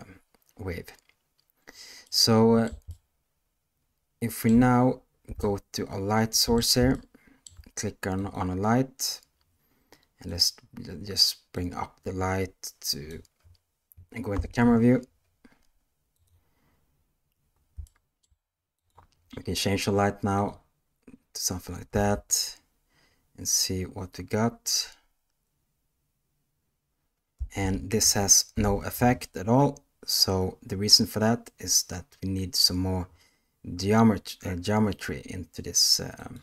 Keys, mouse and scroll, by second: 2.0-2.6 middle drag, 2.8-4.4 ctrl+middle drag, 5.4-6.5 ctrl+middle drag, 6.9-7.4 shift+middle drag, 8.2 click, 10.2 click, 11.6-13.1 drag, 14.3 KP_0, 16.1 click, 17.8-18.2 shift+middle drag, 21.9 space, 27.3 space, 28.5 shift+Left, 36.1 click.